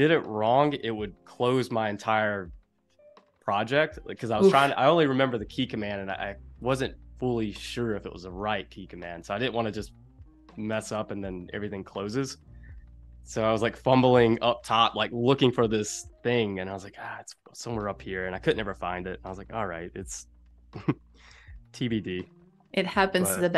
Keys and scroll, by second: 10.7 space, 13.4 super+y, 14.1 space, 16.8 space, 18.5 p.